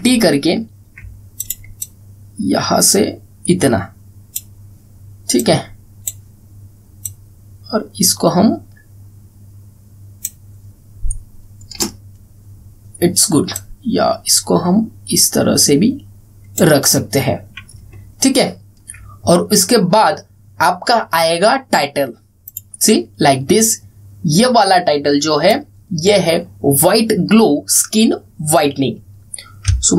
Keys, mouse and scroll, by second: 0.0 ctrl+t, 2.1-5.3 drag, 14.3-17.4 drag, 18.8-19.2 alt+scroll down 1, 19.2 alt+scroll, 19.3-19.6 alt+scroll up 1, 23.2-26.2 drag, 25.8-26.5 typing.